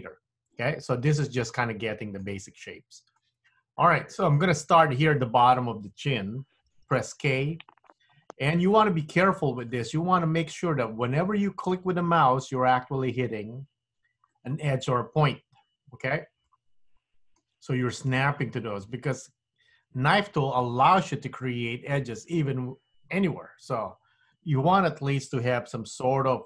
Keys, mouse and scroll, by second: 0.7 middle click, 2.4-2.7 scroll up 1, 2.7-3.3 scroll down 1, 3.3 middle click, 4.4 scroll down 1, 7.0 k, 16.6 middle click.